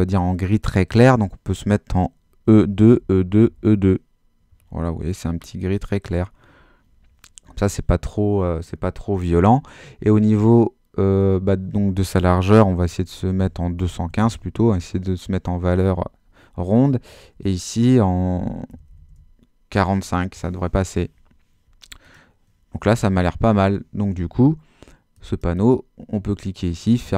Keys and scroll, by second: 2.3-4.2 typing, 13.2-14.6 typing, 14.8 Tab, 18.5-19.4 typing.